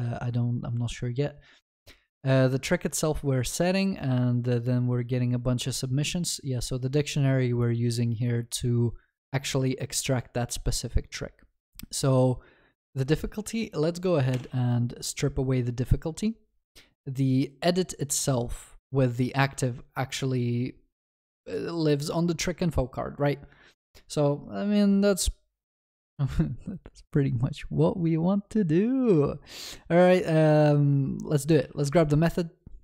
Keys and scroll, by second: 31.6 ctrl+x.